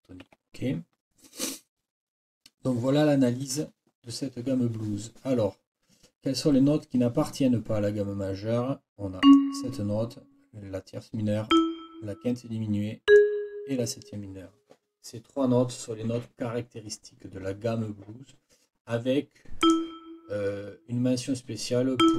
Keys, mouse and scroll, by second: 0.2 Escape, 9.2 click, 11.5 click, 13.1 click, 19.6 click, 22.0 click.